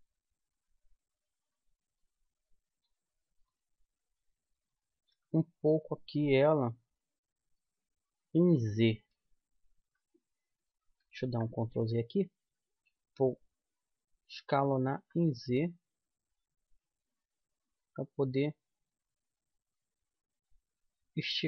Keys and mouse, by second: 2.4-4.7 middle drag, 5.4-7.8 middle drag, 10.1 KP_1, 11.5 ctrl+z, 14.7 s.